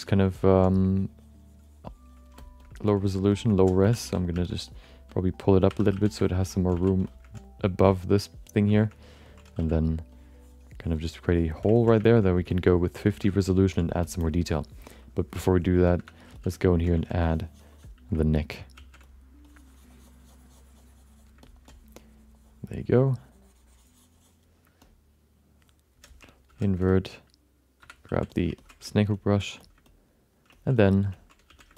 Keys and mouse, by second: 0.1 ctrl+alt+middle click, 0.4 middle click, 0.7-2.3 drag, 2.4 alt+shift+middle click, 2.6 alt+middle click, 3.3 alt+shift+middle click, 3.8 3, 4.0 f, 4.3 f, 4.9 click, 5.7 2, 5.9 f, 6.2 alt+shift+middle click, 6.4 alt+middle click, 6.7 f, 7.0 alt+shift+middle click, 7.6 click, 7.9 click, 8.1 click, 8.7 shift+middle click, 8.9 alt+middle click, 9.2 ctrl+middle click, 9.6 f, 10.1-11.5 drag, 11.7 ctrl+middle click, 12.0 shift+middle click, 12.2 middle click, 12.5 alt+shift+middle click, 12.7 alt+middle click, 13.0 shift+middle click, 13.2 alt+middle click, 14.0 shift+middle click, 14.2 alt+middle click, 16.0 4, 16.3 f, 16.5 middle click, 16.9 f, 17.2 click, 18.7 shift+f, 19.4-21.5 drag, 21.4 middle click, 21.4 right click, 21.7-24.4 drag, 24.8-25.9 alt+middle drag, 26.5 ctrl+i, 27.8 5, 28.1 f, 28.6 ctrl+alt+middle click, 28.9 alt+shift+middle click, 29.1 middle click, 29.4 f, 29.9 alt+middle click, 30.5 ctrl+middle click, 30.8 alt+middle click, 31.1 ctrl+alt+middle click, 31.5 f, 31.7 shift+middle click.